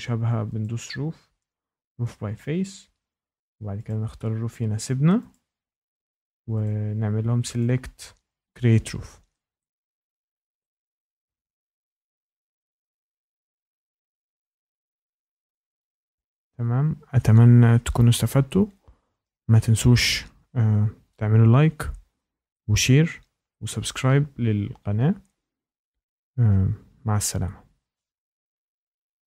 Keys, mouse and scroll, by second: 0.6 click, 2.0 click, 3.8 click, 5.3 click, 6.6 click, 7.5 click, 8.5 click, 10.3 click, 10.3 middle click, 10.6 shift+right click, 10.9 middle click, 10.9 middle click, 11.0 middle click, 11.0 scroll, 11.7 ctrl+z, 12.0 ctrl+z, 12.3 ctrl+z, 12.6 ctrl+z, 12.9 ctrl+z, 13.2 ctrl+z, 13.5 ctrl+z.